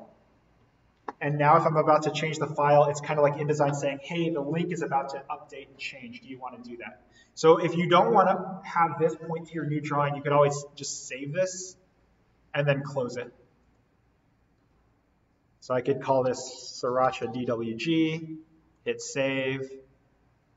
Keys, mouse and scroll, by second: 11.5 click, 16.2-17.8 typing, 18.7 click.